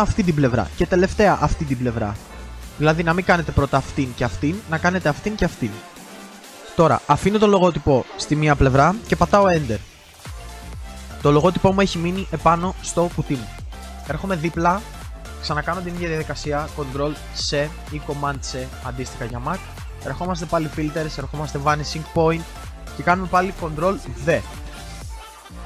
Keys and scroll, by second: 16.3 ctrl+t, 17.0 ctrl+c, 23.3 ctrl+c, 23.9 ctrl+v.